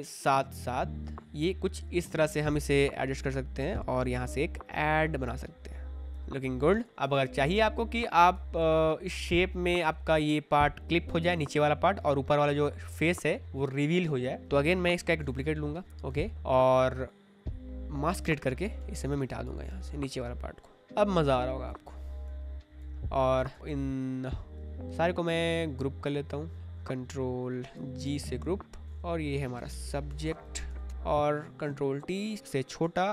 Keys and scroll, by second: 2.2 ctrl+t, 6.0 Return, 7.0 ctrl+z, 15.2 ctrl+j, 18.7 b, 22.9 v, 27.9 ctrl+g, 29.0-31.1 typing, 31.6 ctrl+t.